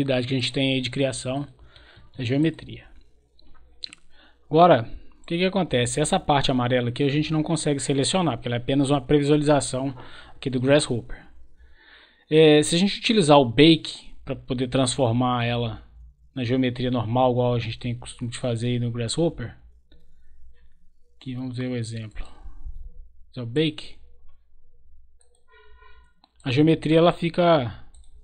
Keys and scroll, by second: 1.9 Escape.